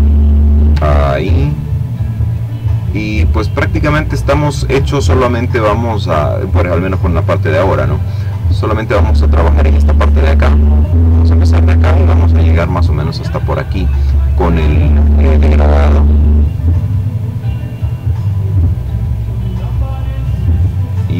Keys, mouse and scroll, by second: 0.2-2.0 ctrl+middle drag, 2.0-2.6 ctrl+scroll up 3, 4.2 click, 5.4 click, 6.8 click, 9.5-12.4 drag, 12.8 click, 15.3-16.7 drag, 16.7-17.9 drag, 19.2 click.